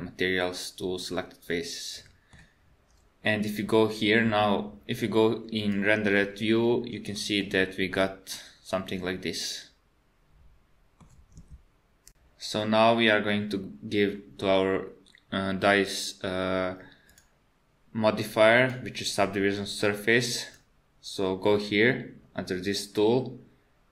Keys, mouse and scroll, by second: 1.0 middle click, 6.5 click, 7.5 middle click, 7.9 Tab, 8.3 middle click, 16.0 click, 17.1 click, 20.6 click.